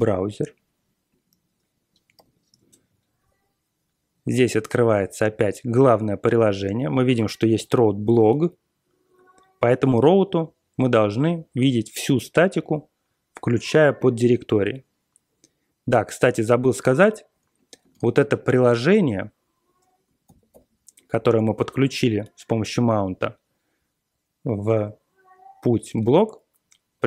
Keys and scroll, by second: 2.1 4, 2.6 Return, 17.9 ctrl+x, 18.2 b, 18.6 Return, 20.3 ctrl+l, 20.5 ctrl+l.